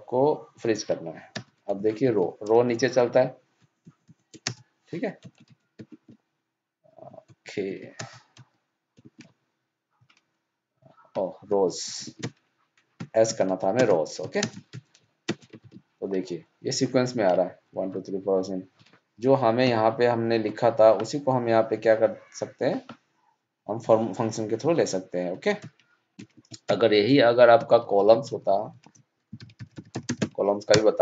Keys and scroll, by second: 2.0 ctrl+c, 15.2 ctrl+shift+Down, 15.5 ctrl+d.